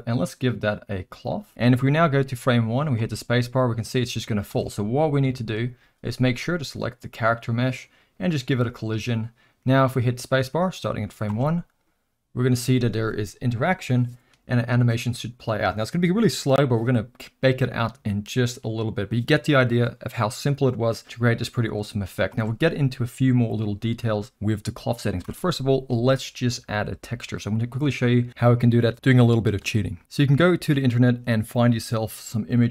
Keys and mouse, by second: 1.3 click, 1.5 middle click, 2.9 space, 4.5 space, 5.4 shift+Left, 6.6 drag, 8.4 click, 11.3 space, 22.4 space, 25.3 shift+Left.